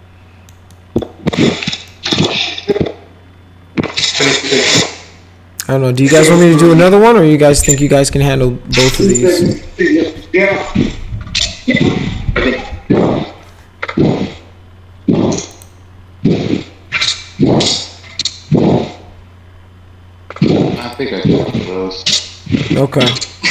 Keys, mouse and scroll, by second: 0.7 middle click, 1.3 middle click, 2.7-5.7 middle drag, 5.9 middle click, 7.3 middle click, 8.0 middle click, 8.7 middle click, 9.2 middle click, 15.5 click, 20.8 click.